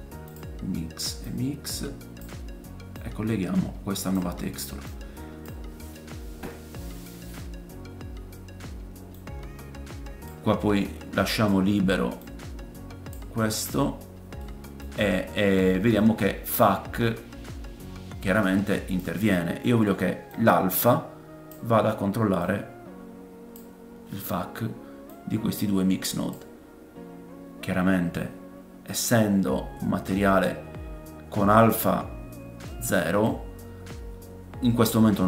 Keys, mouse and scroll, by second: 1.2-5.2 middle drag, 1.2-5.2 right drag, 5.6-9.1 drag, 14.4 middle click, 15.1 scroll up 1, 15.6 middle click, 16.6 click, 22.4 click, 25.1 click, 32.6 middle click.